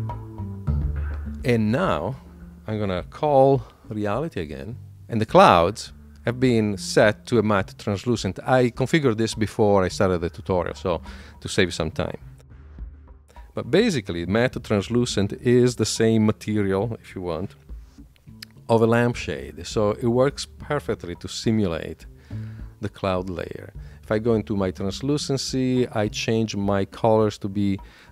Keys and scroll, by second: 3.8 shift+super+l.